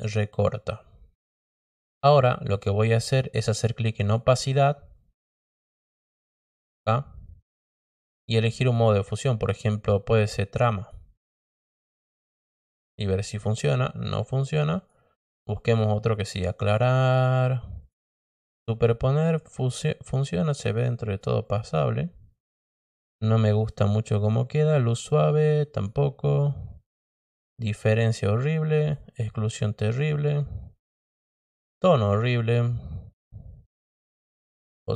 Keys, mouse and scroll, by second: 3.9 click, 8.2 click, 10.7 click, 14.7 click, 15.9 click, 16.7 click, 17.7 click, 21.4-23.5 drag, 24.6 click, 25.7 click, 26.8 click, 27.9 click, 28.7 click, 29.8 click, 30.8 click, 32.0 click, 33.6 click, 34.7 click.